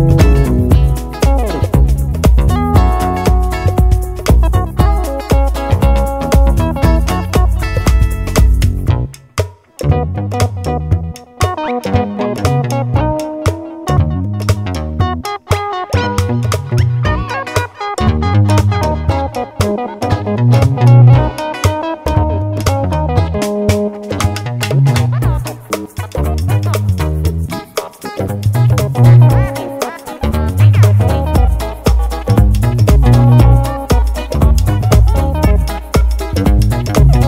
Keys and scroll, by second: 6.7 super+c, 6.9 super+v, 12.7 super+c, 12.9 super+v.